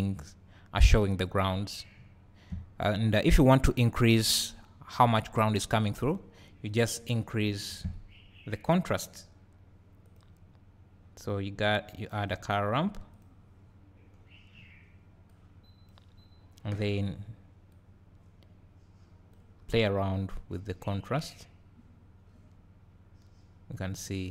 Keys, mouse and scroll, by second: 0.5 scroll up 1, 1.2-2.0 scroll down 2, 2.0 `, 2.8-4.0 scroll up 2, 4.0-5.8 scroll up 1, 5.8-6.7 scroll up 1, 6.7 click, 8.9 click, 14.1 click, 15.3 click, 17.8-24.3 drag.